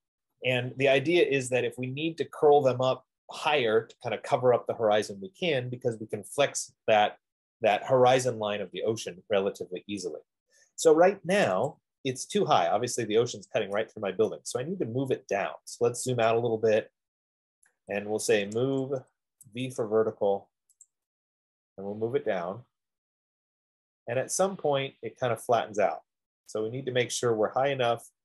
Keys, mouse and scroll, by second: 0.1 middle click, 11.9 click, 12.0 click, 12.8 middle click, 13.2 middle click, 14.5 scroll up 2, 14.5-14.9 scroll down 2, 15.4-15.8 scroll down 2, 16.4 scroll, 17.9 right click, 18.6-19.8 typing, 18.8 middle click, 21.3 click, 23.1-23.9 typing, 23.4-26.2 drag.